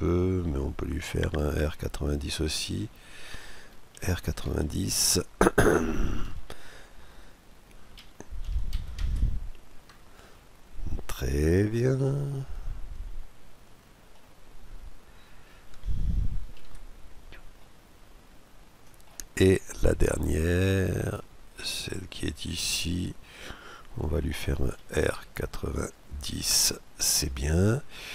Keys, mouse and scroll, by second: 0.1 middle click, 3.7 r, 7.7 r, 11.0-12.8 middle drag, 14.2-16.5 middle drag, 16.3 KP_Decimal, 17.3-18.9 middle drag, 19.4-19.8 scroll up 1, 19.8-21.5 middle drag, 21.5-22.5 right drag, 24.5 r.